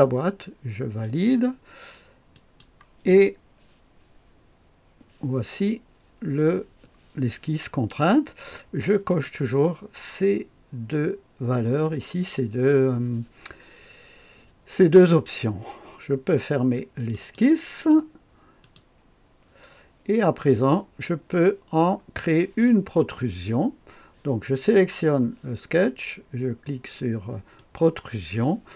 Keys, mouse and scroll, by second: 1.0 click, 2.3 click, 9.1 click, 17.1 click, 18.6 click, 27.5 click.